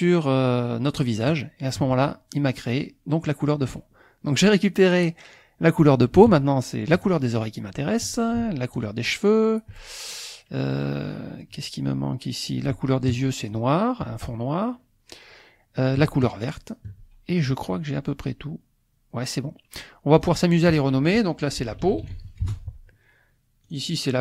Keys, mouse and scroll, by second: 1.3 shift+click, 7.1 shift+click, 8.7 shift+click, 13.4 shift+click, 16.2 shift+click, 20.2 click, 21.6 p, 21.9 a, 22.1 u, 22.4 Return, 23.6-24.2 drag.